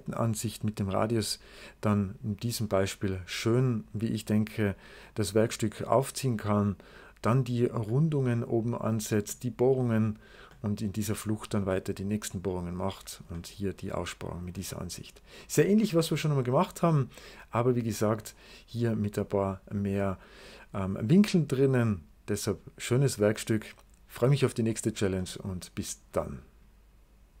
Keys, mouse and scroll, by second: 4.3 click, 7.8-9.1 middle drag, 10.4-11.8 middle drag, 13.2-14.4 middle drag, 17.8 middle click, 18.2 right click, 25.1-27.4 middle drag.